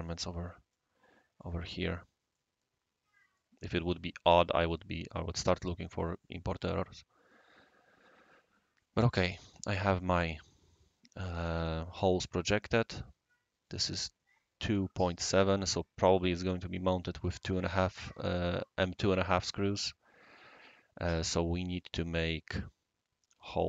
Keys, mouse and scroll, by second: 0.7 click, 1.7 drag, 1.7-2.7 middle drag, 2.3-5.8 right drag, 6.9-8.2 middle drag, 7.4-7.7 scroll down 1, 9.0 click, 11.9 click, 12.7 click, 21.8-23.3 scroll up 1, 23.3 q.